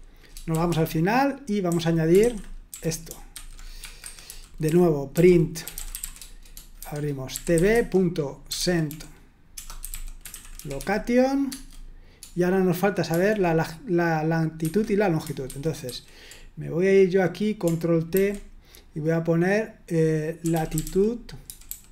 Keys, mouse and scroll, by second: 0.0-11.5 typing, 13.1 typing, 14.6 Escape, 15.4 super+1, 15.9 super+2, 18.1 ctrl+t, 20.2-21.9 typing.